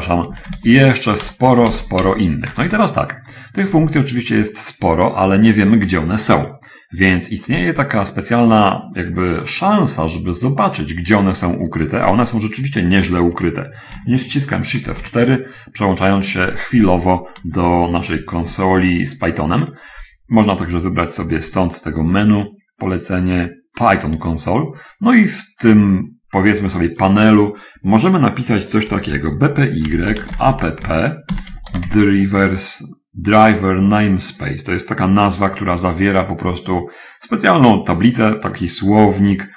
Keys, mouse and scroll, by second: 0.0-0.9 typing, 2.2 0, 2.2 ., 2.9 BackSpace, 3.1 BackSpace, 4.2 BackSpace, 4.4 BackSpace, 15.3 shift+F4, 21.3 click, 29.0-31.9 typing, 31.9 Tab.